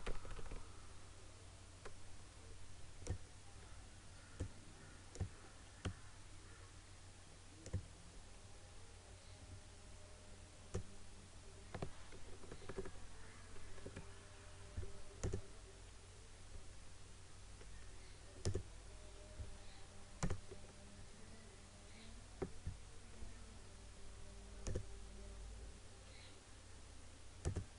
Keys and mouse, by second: 0.1 Left, 3.2-12.4 drag, 12.4 Right, 13.8 Up, 15.2 click, 18.4 click, 24.8 click, 27.4 click.